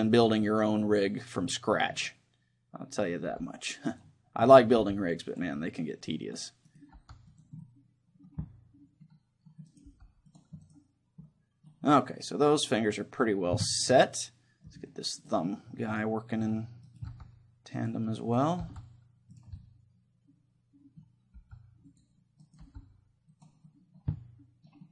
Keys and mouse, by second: 0.2-2.1 drag, 0.4-3.9 middle drag, 3.3 g, 4.0 click, 4.8 g, 5.6 middle click, 6.0-7.8 drag, 7.0 g, 7.6 middle click, 7.6 right click, 8.4 click, 8.7-9.7 middle drag, 9.7-12.3 drag, 9.7-12.2 right drag, 9.9-11.2 middle drag, 9.9 g, 11.3 middle click, 12.2-16.9 middle drag, 12.3 right click, 16.9-17.9 right drag, 17.1 middle click, 17.1 g, 18.6 g, 19.6-21.0 drag, 19.6 right click, 20.4 middle click, 21.4 g, 22.0-24.9 drag, 22.4-24.9 middle drag, 22.6 g, 23.8 right click.